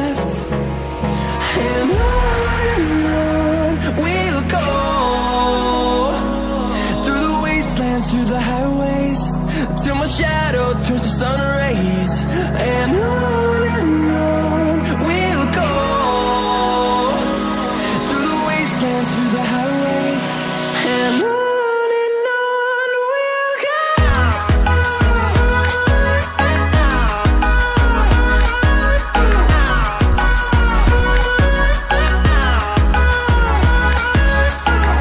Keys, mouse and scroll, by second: 0.6 click, 11.2 scroll up 1, 12.3 click, 12.9 ctrl+c, 13.1 ctrl+v, 14.0 click.